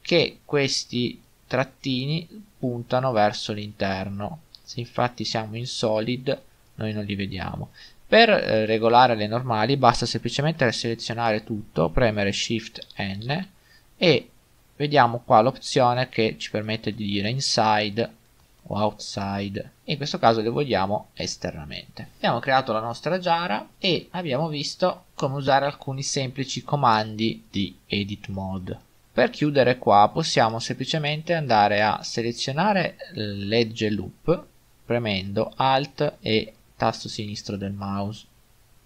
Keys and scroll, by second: 4.4 z, 12.8 shift+n, 23.7 Tab.